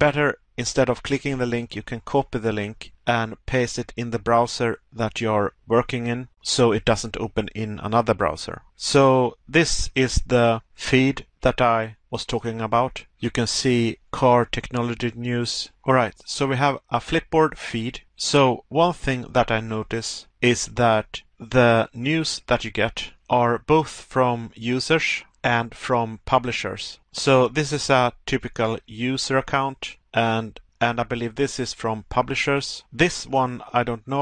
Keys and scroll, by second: 0.0 Pause, 9.0 Pause, 12.1 Pause, 25.4 Pause.